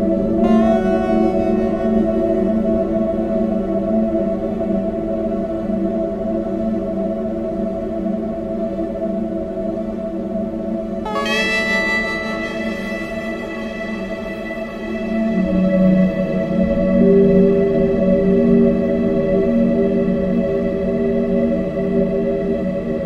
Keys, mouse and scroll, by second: 0.1 click, 2.1 click, 2.2 click, 3.7 click, 4.6 right click, 5.7 click, 5.9 space, 7.0 space, 7.4 space, 7.8 space, 8.7 click, 9.9 scroll up 1, 10.1 scroll down 1, 10.7 shift+a, 12.6 click, 13.8 click, 16.6 click, 17.1 click, 19.3 click, 20.0 click, 20.7 click, 21.5 KP_0, 22.1 KP_0.